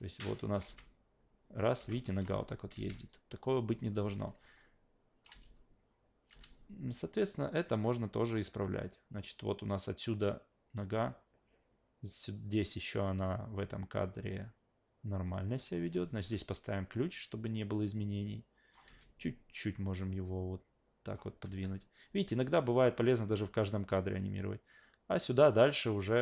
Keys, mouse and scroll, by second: 0.6 alt+v, 1.8 alt+v, 2.1 click, 2.2 alt+v, 2.7 alt+v, 3.1 alt+click, 4.6-5.2 drag, 5.3 alt+v, 6.3 alt+v, 6.5-15.9 drag, 16.1 s, 16.8 click, 18.9 e, 20.2 click, 21.5 s, 22.3 click.